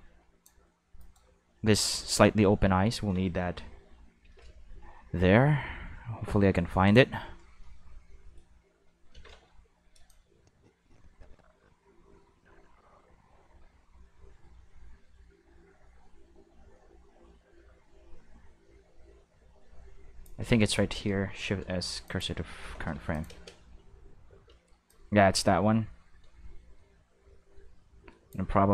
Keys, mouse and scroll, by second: 1.0 right click, 2.0 middle click, 2.6 middle click, 4.2 shift+d, 6.9 click, 7.6 middle click, 9.8 middle click, 10.1-20.2 drag, 21.3 shift+s, 22.1 click, 23.1 click, 23.3 space, 24.3 space, 24.6 middle click, 24.9-28.3 drag.